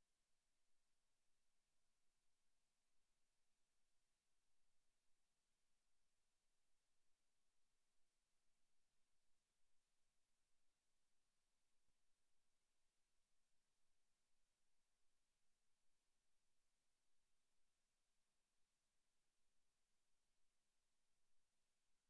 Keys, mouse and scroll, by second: 0.9 right click, 1.8 click, 3.4 click, 8.4 middle click, 9.7 click, 13.1-13.4 scroll up 1, 14.1 shift+middle click, 14.3 middle click, 19.9 click, 21.2 click.